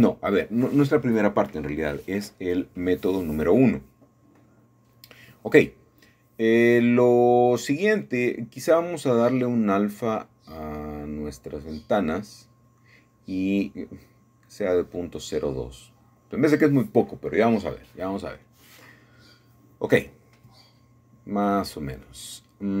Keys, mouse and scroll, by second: 3.0 middle click, 8.0-9.1 shift+middle drag, 9.2-14.7 drag, 14.7 ., 14.9 KP_0, 15.0 KP_2, 15.2 Return, 17.8-18.3 scroll down 1, 18.3-22.8 middle drag.